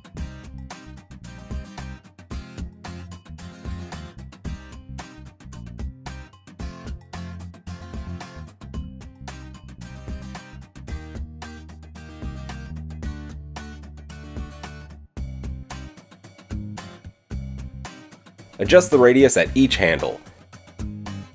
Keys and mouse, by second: 0.1 shift+drag, 0.4-6.5 shift+middle drag, 5.1 g, 7.9 click, 8.9 click, 10.6 g, 11.7 g, 12.3 click, 13.0 g, 14.6 g, 15.0-18.6 middle drag, 18.6 click, 18.8-21.3 middle drag, 20.0 alt+s.